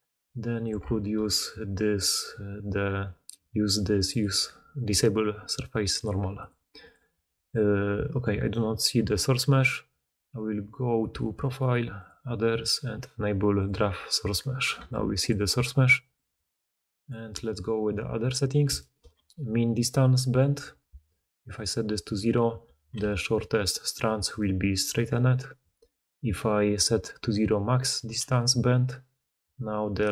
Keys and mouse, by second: 0.0 x, 0.0 d, 0.6 d, 1.6 click, 1.8-4.2 right drag, 4.2-5.8 middle drag, 5.8 right click, 6.4-6.8 middle drag, 6.8 right click, 6.8 middle click, 7.2 right click, 7.5 middle click, 8.4 right click, 8.4-12.0 middle drag, 12.0-13.6 drag, 13.6-14.8 middle drag, 14.7-16.2 typing, 14.8-16.2 drag, 15.4 middle click, 15.4 right click, 22.9-24.4 typing, 30.0 d.